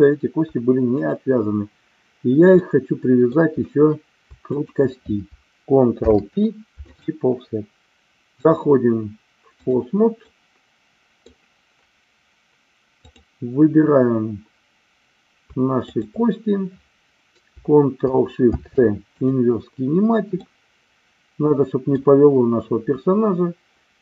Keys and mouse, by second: 2.6 middle click, 4.6 shift+click, 6.0 ctrl+p, 8.4-9.8 drag, 10.2-11.3 middle drag, 15.9 shift+click, 19.2 ctrl+shift+c, 20.3-21.9 middle drag.